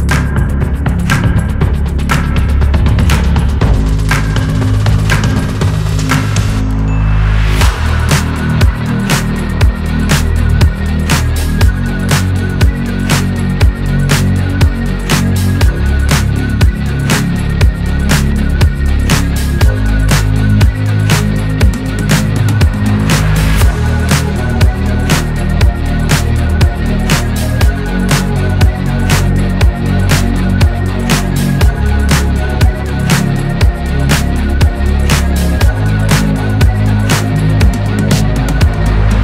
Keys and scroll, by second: 11.1 Escape, 37.5 BackSpace, 37.7 3, 38.8 Return.